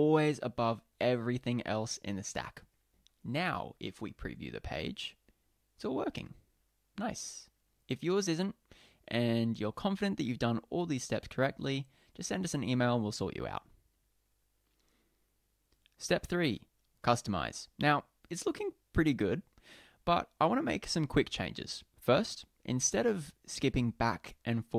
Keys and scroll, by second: 4.0 super+p.